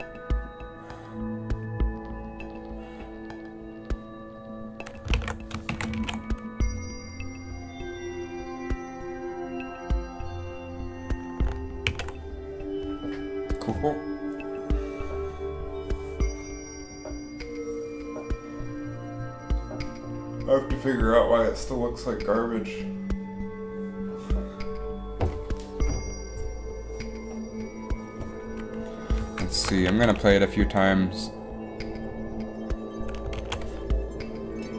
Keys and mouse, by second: 5.3 alt+a, 5.9 shift+Left, 6.1 alt+a, 12.1 alt+a, 29.7 shift+Left, 30.0 alt+a, 33.6 alt+a.